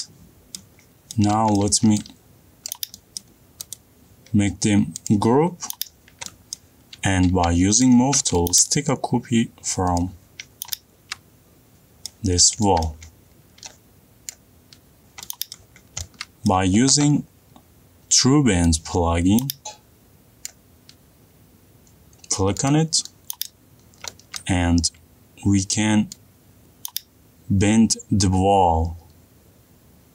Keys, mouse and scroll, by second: 0.0 middle click, 1.8 middle click, 1.8 click, 2.3 middle click, 3.4 click, 4.0 middle click, 4.5 right click, 5.8 click, 6.2 middle click, 6.2 click, 6.3 middle click, 6.7 middle click, 7.3 middle click, 8.1 m, 8.6 click, 10.5 middle click, 10.7 click, 11.1 middle click, 11.6 middle click, 12.8 middle click, 13.1 middle click, 13.6 middle click, 13.8 middle click, 13.9 middle click, 14.4 middle click, 15.1 middle click, 15.4 click, 15.7 click, 15.7 middle click, 16.3 middle click, 16.5 middle click, 16.5 middle click, 17.2 middle click, 21.2 click, 22.2 click, 24.5-25.2 scroll up 3, 25.2 middle click.